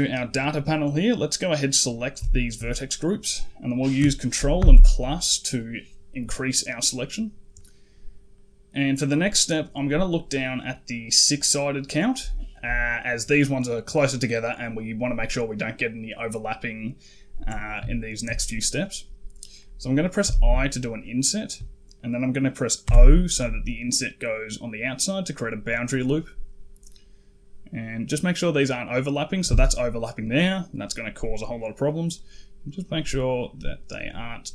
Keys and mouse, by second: 1.5 click, 2.2 shift+click, 4.4 ctrl+KP_Add, 6.8 click, 7.4 middle click, 8.2 middle click, 9.2 middle click, 12.2 shift+middle click, 17.8 shift+middle click, 20.1 i.